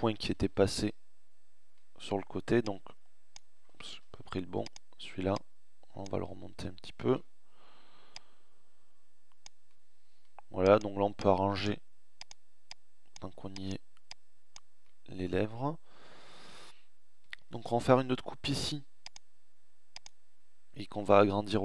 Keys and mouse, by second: 3.0 ctrl+z, 14.8 middle click, 17.4 ctrl+r, 20.7 s.